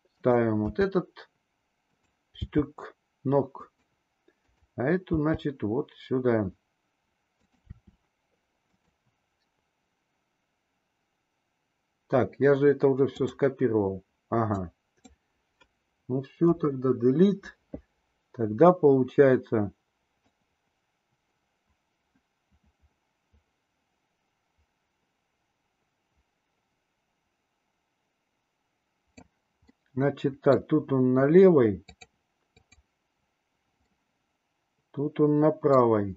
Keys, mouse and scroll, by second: 0.7 r, 2.3 g, 4.4 click, 5.2 g, 7.7 r, 13.0 click, 14.6 click, 16.4 Delete, 20.2-29.3 drag, 29.6-30.6 middle drag, 31.8 click, 32.6 click, 33.8-35.8 middle drag.